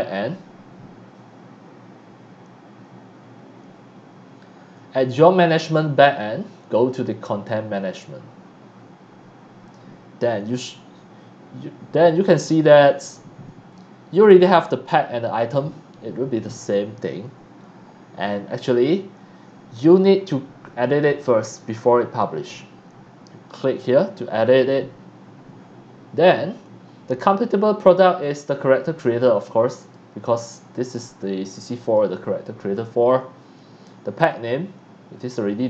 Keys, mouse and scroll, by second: 18.2 scroll down 1, 28.0 click, 29.8 click, 30.8 click, 31.8 click, 34.1 click.